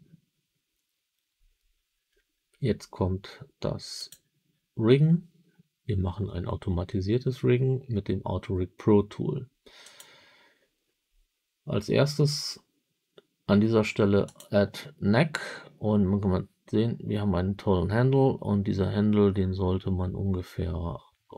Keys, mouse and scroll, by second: 3.9 click, 9.8 click, 14.2 click.